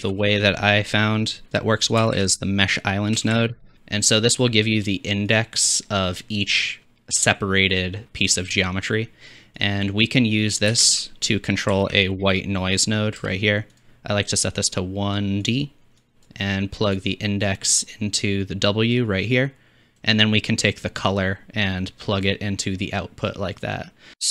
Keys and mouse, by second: 0.0 shift+a, 5.6-11.3 drag, 10.7 shift+a, 13.9-14.5 drag, 15.5-24.3 drag.